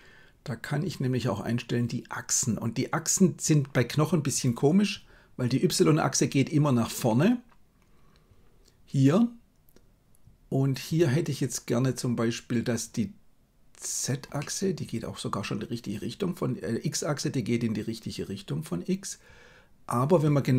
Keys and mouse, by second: 14.3-20.2 middle drag.